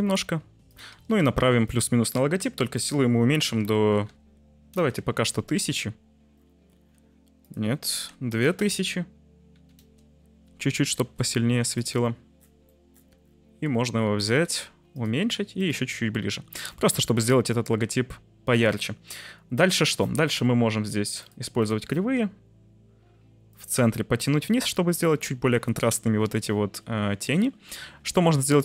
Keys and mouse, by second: 0.0-1.0 typing, 0.6 click, 2.9-4.8 drag, 4.0 0, 5.5 `, 7.5-9.7 drag, 8.6 0, 10.9 g, 12.7 middle click, 14.5 s, 14.9 click, 15.0 g, 15.5 click, 15.7 `, 19.6 click, 21.2 click, 21.6 drag, 23.6 click, 24.5 click.